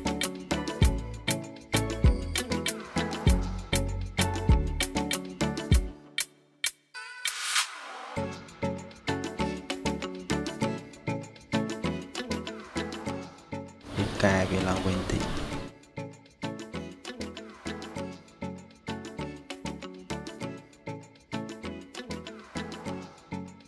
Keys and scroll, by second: 5.5-6.5 typing.